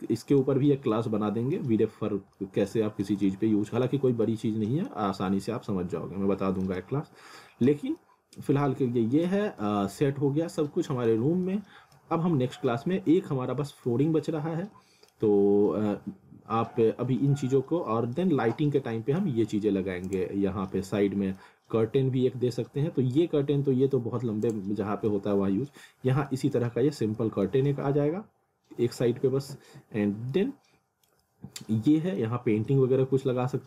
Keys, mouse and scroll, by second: 0.6 scroll up 1, 0.9 alt+middle click, 2.1 scroll down 1, 2.4 alt+middle click, 4.0 scroll up 1, 4.2 alt+middle click, 4.9 scroll up 1, 5.4 alt+middle click, 6.8 alt+middle click, 7.8 scroll down 1, 8.0 alt+middle click, 9.4 scroll up 1, 9.6 middle click, 11.2 scroll down 1, 11.5 alt+middle click, 12.1 scroll up 1, 12.5 alt+middle click, 13.4 scroll down 1, 13.9 alt+middle click, 16.0-16.7 scroll down 1, 17.1 scroll up 1, 17.3 alt+middle click, 18.6 scroll up 1, 18.8 alt+middle click, 20.1 click, 20.5 scroll down 1, 20.7 middle click, 21.7 scroll up 1, 22.9 scroll down 1, 24.5 click, 24.8 scroll up 1, 25.1 alt+middle click, 26.3 alt+middle click, 27.2 alt+middle click, 30.2 scroll down 1, 30.3 alt+middle click, 31.3 alt+middle click.